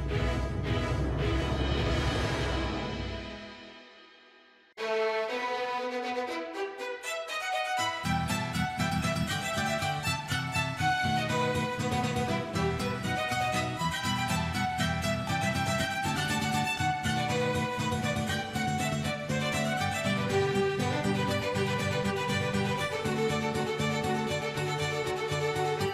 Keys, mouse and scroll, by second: 0.4 click, 0.7 i, 1.2 space, 2.1 space, 2.3-3.4 drag, 3.4 space, 3.6 space, 3.7 drag, 4.7 shift+middle click, 4.9 middle click, 5.0 shift+middle click, 5.2 middle click, 5.4-5.8 scroll up 5, 5.6 click, 6.0 click, 6.2 click, 6.5 click, 6.7 KP_Decimal, 6.8 scroll down 4, 7.0 shift+middle click, 7.3 click, 8.5 scroll down 2, 8.6 middle click, 8.9-9.6 scroll up 5, 9.0-9.3 shift+middle drag, 9.5 middle click, 9.7 shift+middle click, 9.8 scroll down 2, 9.9-10.6 middle drag, 10.6 scroll down 3, 10.7 middle click, 11.0 middle drag, 11.2 scroll up 1, 11.3-11.8 shift+middle drag, 11.9 scroll up 3, 12.0 shift+middle drag, 12.2-12.6 middle drag, 12.6-13.0 scroll down 3, 12.7 middle click, 12.9 shift+middle click, 13.0 click, 13.3 middle drag, 13.6 shift+middle click, 13.8 click, 15.5 click, 15.8 right drag, 16.3 a, 16.6 click, 17.4 right drag, 18.0-19.6 drag, 20.0 shift+d, 21.0 click, 21.1 space, 22.0 space, 22.1 drag, 22.4 click, 22.8 click, 23.4 space, 23.9-25.9 drag.